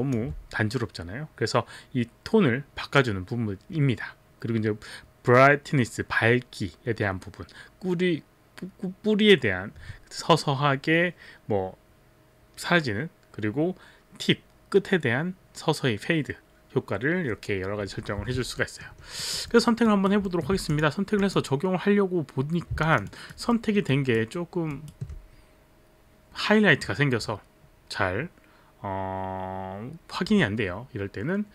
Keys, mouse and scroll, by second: 0.1 alt+click, 18.7 alt+middle click, 19.3 alt+right click, 19.6 alt+middle click, 19.6 alt+right click, 19.9 alt+right click, 20.3 alt+right click, 20.3 alt+middle click, 20.3 alt+middle click, 20.3 alt+right click, 20.7 click, 20.7 alt+middle click, 20.7 alt+right click, 21.2 click, 21.2 alt+middle click, 22.8 alt+click, 23.0 alt+right click, 23.5 alt+middle click, 23.9 alt+right click, 24.7 alt+right click.